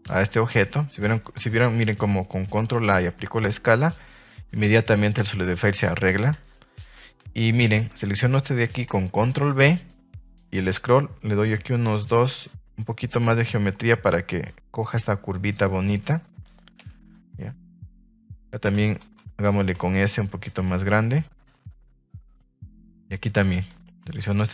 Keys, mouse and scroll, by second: 0.2-0.8 middle drag, 1.4 ctrl+z, 2.7 ctrl+a, 5.1 middle click, 5.6 ctrl+s, 5.8 middle click, 6.3 Tab, 9.2 ctrl+b, 13.1 click, 13.3 Tab, 13.7 middle click, 15.9 middle drag, 16.7 KP_3, 17.1 Tab, 17.6 shift+middle drag, 17.9 z, 18.6 a, 18.7 a, 20.5 click, 23.0 Tab, 23.7 Tab, 24.2 alt+right click.